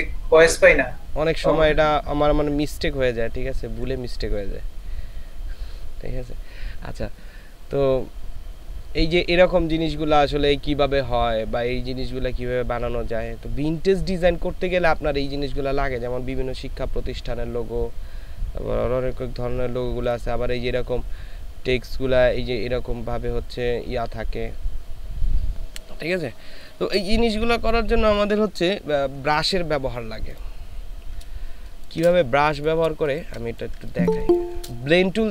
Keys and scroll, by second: 31.6 ctrl+space, 33.0 ctrl+space, 33.8 ctrl+space.